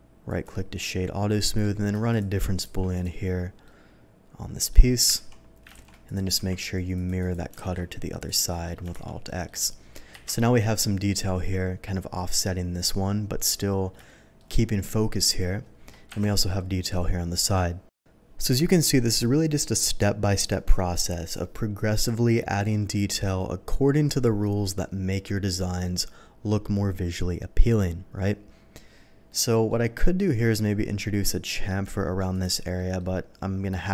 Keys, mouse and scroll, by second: 0.2 click, 1.4 middle click, 2.1 shift+click, 2.6 q, 2.9 click, 3.6-4.7 middle drag, 5.1 ctrl+z, 5.8 ctrl+shift+z, 6.0 ctrl+shift+click, 6.3 q, 6.9 click, 7.2 click, 7.7 alt+x, 8.1 click, 8.5 middle click, 8.9 shift+2, 9.2 middle drag, 10.1 KP_3, 14.0 shift+middle click, 16.0 KP_1, 29.3-29.6 middle drag, 32.3 click, 32.7 middle click.